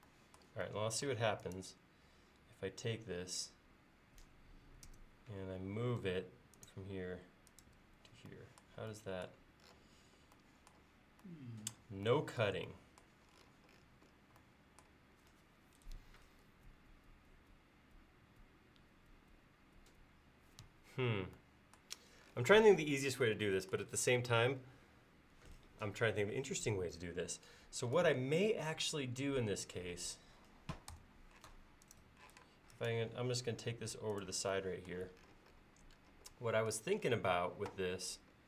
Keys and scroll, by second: 4.9 m, 28.9 e, 30.9 BackSpace, 31.5 space.